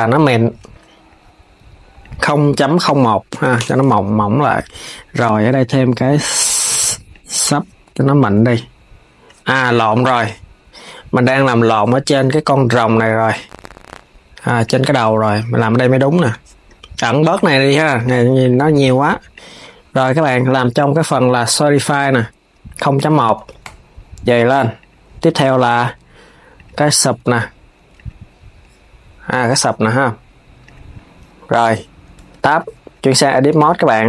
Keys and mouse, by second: 1.7 click, 2.4-5.5 drag, 5.8-8.8 drag, 11.1-14.4 drag, 17.0-22.0 drag, 22.6-27.1 drag, 27.1 KP_3, 27.7 click, 30.3 click, 31.9 Tab.